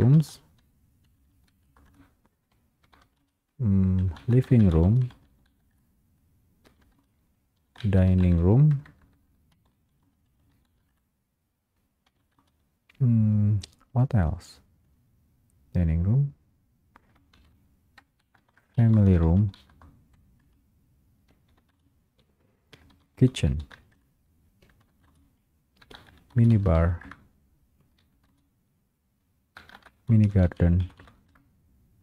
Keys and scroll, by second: 3.4 Return, 3.4 space, 5.8 Return, 10.2 Return, 10.2 space, 11.0 Return, 12.6 space, 19.0 space, 20.6 Return, 21.8 space, 24.0 space, 24.0 Return, 25.2 space, 27.2 Return, 28.4 Return, 28.4 space, 31.4 Return.